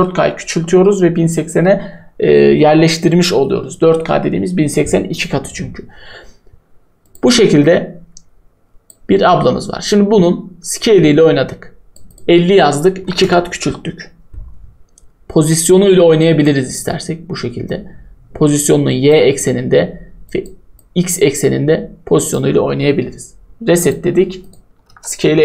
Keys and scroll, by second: 12.7-13.5 typing, 24.5-25.4 typing.